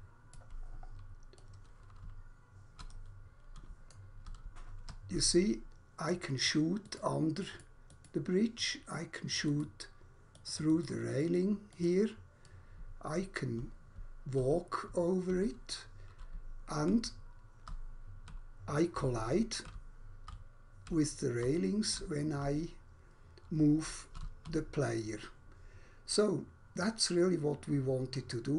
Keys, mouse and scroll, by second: 0.7 scroll down 1, 1.3 right click, 2.0-3.3 typing, 4.5-6.0 typing, 6.1 click, 6.8 click, 7.5 click, 9.5 click, 10.3 click, 10.7 click, 11.1 click, 12.5 right click, 12.8-24.3 typing.